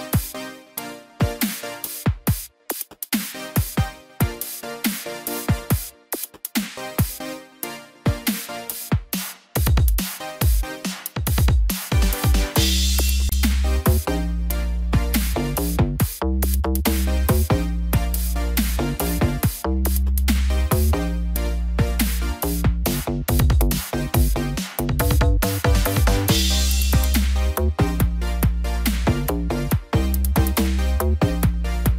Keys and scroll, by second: 28.7 ctrl+=.